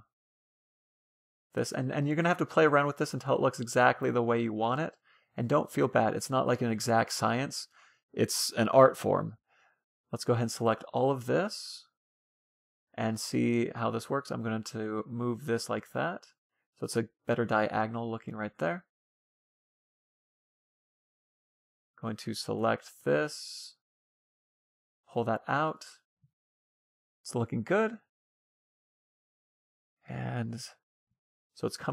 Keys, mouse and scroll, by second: 0.2-1.8 drag, 3.2 middle click, 4.1-5.6 drag, 6.0 ctrl+z, 6.8 middle click, 8.6 a, 8.9 c, 9.3 middle click, 13.5-15.0 middle drag, 14.1-15.6 drag, 16.5-19.2 middle drag, 19.2-19.6 scroll up 1, 20.2-21.8 middle drag, 20.5 a, 20.9-22.6 right drag, 23.2 middle click, 23.8-25.4 drag, 25.4-27.1 middle drag, 27.6-31.1 middle drag.